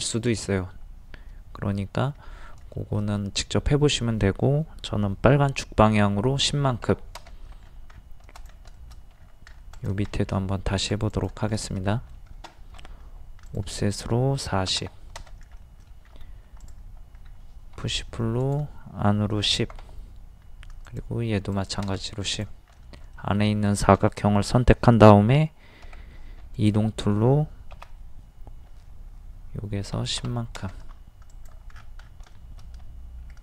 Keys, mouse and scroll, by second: 2.2 scroll down 1, 2.8 shift+middle click, 6.4 KP_1, 6.5 KP_0, 7.6-7.9 scroll down 1, 8.4 click, 8.8 shift+middle click, 9.2 scroll up 1, 9.8 click, 10.1 shift+middle click, 10.6 scroll up 1, 10.9 click, 11.5 middle click, 12.8 o, 13.5 click, 14.5 KP_4, 14.6 KP_0, 15.6 middle click, 16.2 scroll up 1, 16.6 click, 17.3 scroll up 1, 17.8 scroll up 1, 19.4 KP_1, 19.5 KP_0, 20.9 click, 25.8 m, 26.5 click, 27.8 Right, 30.0 KP_1, 30.0 KP_0, 31.3 click, 31.7 scroll down 1, 32.4 shift+middle click, 33.3-33.4 scroll down 1.